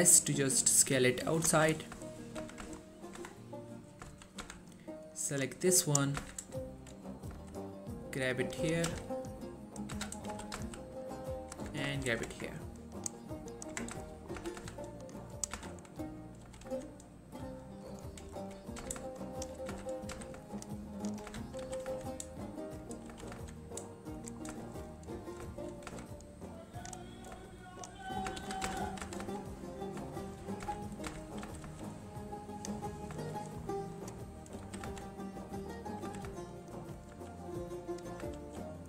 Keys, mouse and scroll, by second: 1.4 click, 1.6 1, 2.1 shift+middle click, 2.5 z, 2.8 Tab, 2.9-3.3 scroll down 1, 3.3 Tab, 3.5 middle click, 3.9-4.2 scroll up 1, 4.2 1, 4.5 z, 5.5-6.1 click, 6.3 z, 6.7-7.4 scroll up 1, 7.4 g, 8.7 click, 9.0 z, 9.5-10.1 click, 10.0 z, 10.4 g, 10.6 z, 11.4 click, 11.7 z, 12.0 3, 12.4 Tab, 12.6-13.1 scroll down 1, 13.1 click, 13.8 Tab, 14.1 shift+middle click, 14.3 scroll up 1, 14.5-16.7 typing, 15.3 click, 16.1-16.6 scroll down 1, 18.0 right click, 18.5 scroll up 1, 18.9 z, 19.4 shift+click, 19.8 z, 20.2 z, 20.6 ctrl+click, 21.4 ctrl+z, 21.7 g, 22.0 y, 22.9 right click, 23.2 g, 23.4 y, 24.3 click, 24.5 scroll down 2, 24.8 shift+middle click, 25.0-25.6 scroll up 1, 25.6 shift+middle click, 26.0 z, 26.7 click, 27.7 shift+click, 28.5 ctrl+z, 29.1 g, 29.9 right click, 30.4 shift+click, 30.7 z, 31.6 g, 32.6 click, 32.9-33.3 scroll down 1, 33.4 shift+middle click, 33.7-34.1 scroll up 1, 34.1 click, 34.7 g, 34.9 g, 35.7 right click, 36.1 g, 36.4 g, 37.0 click, 37.2 r, 38.0 click, 38.5 ctrl+r.